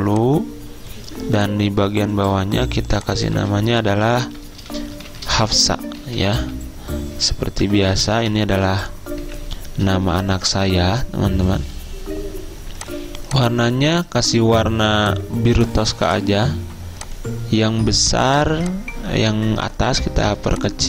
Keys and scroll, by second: 2.9 t, 3.4 ctrl+a, 4.4 Caps_Lock, 5.0-8.2 typing, 9.3 Escape.